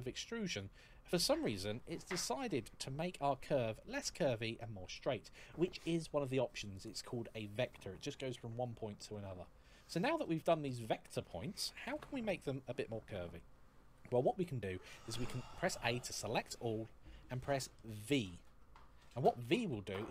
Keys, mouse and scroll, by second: 0.9 click, 6.5 click, 14.9 a, 19.4 v.